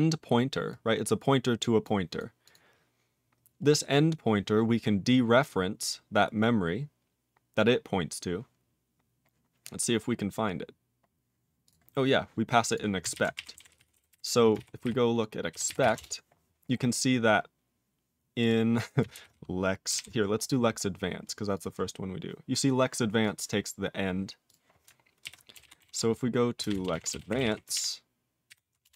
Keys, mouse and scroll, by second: 0.7 click, 1.8 click, 2.1 click, 2.4 click, 3.6-8.6 scroll down 28, 9.0-9.7 scroll down 4, 10.0-11.0 scroll up 21, 11.6 click, 12.7 click, 13.1-14.6 typing, 14.8 ctrl+r, 15.5 ctrl+r, 15.7 ctrl+r, 15.8 ctrl+r, 15.9 Return, 17.5-18.4 scroll up 1, 18.4 click, 19.1 ctrl+r, 19.9 ctrl+g, 20.4-20.9 scroll down 12, 21.5 click, 23.2 click, 23.3 click, 24.5 click, 25.2 ctrl+r, 25.3-27.9 typing, 28.5 ctrl+r, 28.8 Return.